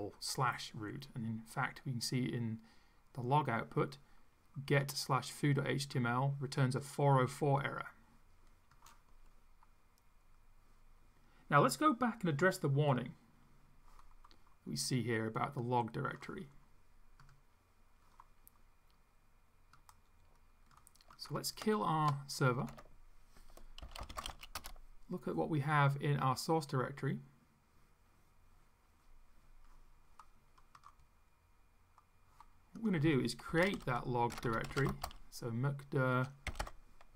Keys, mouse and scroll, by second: 4.8-6.2 drag, 6.8-9.0 drag, 15.6 click, 19.8-21.0 drag, 21.2 click, 22.6 ctrl+c, 23.6-24.9 typing, 32.8 click, 33.3-37.1 typing.